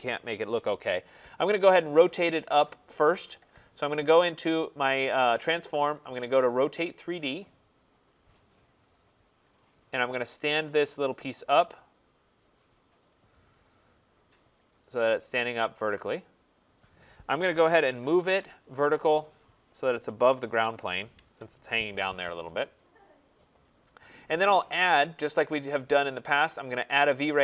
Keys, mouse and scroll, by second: 1.8-7.8 drag, 7.8 middle click, 7.9 scroll, 9.4 click, 10.9 click, 13.0 click, 13.3 scroll, 14.5 click, 15.2-15.9 scroll, 16.6 right click, 17.5-18.7 typing, 18.1 middle click, 19.9 click, 20.8 click, 21.1 Escape, 21.3 Return, 24.2 right click.